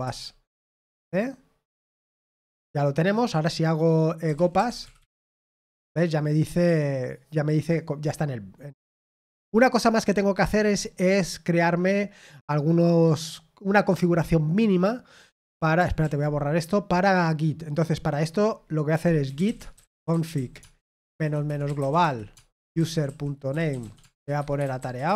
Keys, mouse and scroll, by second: 0.0-0.2 typing, 16.2 ctrl+l, 23.7-25.1 typing.